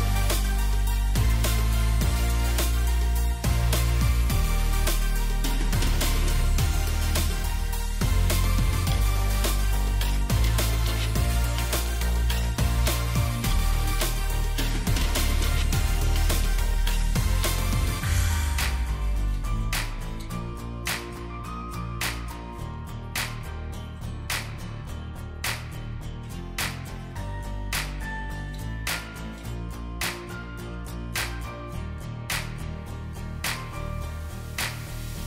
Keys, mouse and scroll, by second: 1.7 double click, 2.4 ctrl+g, 3.2 alt+shift+click, 6.0 alt+click, 8.1 shift+click, 15.6 Delete, 17.2-17.9 alt+scroll up 1, 19.4 right click, 28.9 ctrl+z.